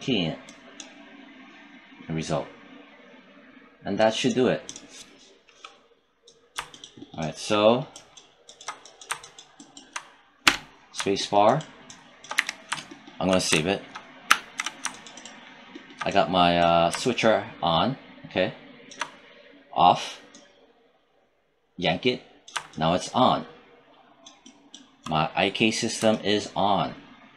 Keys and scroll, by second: 10.3 space, 12.2 w, 14.1 ctrl+s.